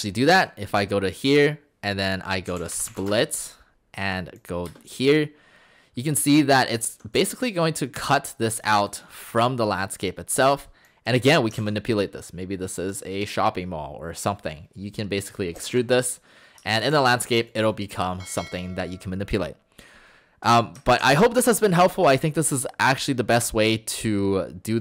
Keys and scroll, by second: 2.2-3.5 typing, 4.7 space, 6.8 Escape, 6.9 Escape, 7.2 Escape, 11.6 ctrl+z, 15.6 Escape, 15.7 Escape.